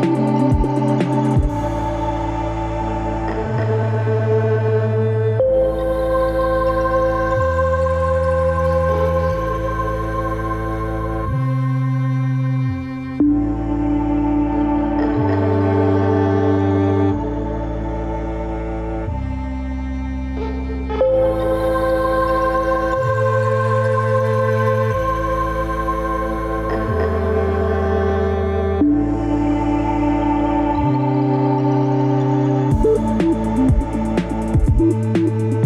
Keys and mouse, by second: 1.1 middle click, 2.5 ctrl+r, 4.9 Tab, 5.6-6.3 middle drag, 6.9 Tab, 8.3 F4, 9.0 Tab, 13.1 click, 16.4 click, 17.5-20.0 middle drag, 20.6 click, 25.9 g, 33.5-34.1 middle drag, 34.5 Tab.